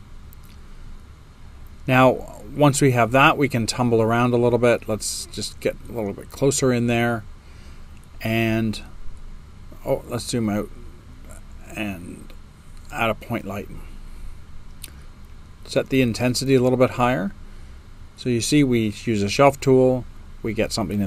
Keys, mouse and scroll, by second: 2.7 click, 2.7 space, 3.6-4.6 right drag, 3.6 space, 4.8-6.3 drag, 4.8 space, 8.8 right click, 8.8 space, 9.5-10.3 drag, 9.5 space.